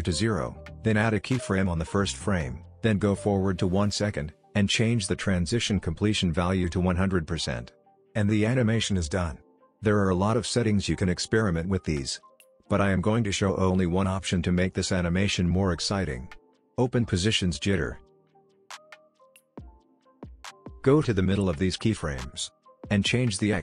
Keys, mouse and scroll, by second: 4.2 space, 5.7-7.3 drag, 7.5-9.1 alt+scroll up 2, 9.9-10.7 click, 10.7 ctrl+z, 11.2-12.5 drag, 12.4 ctrl+z, 16.7 click, 19.1-20.2 click, 20.0 ctrl+z, 21.1 u, 22.3 click.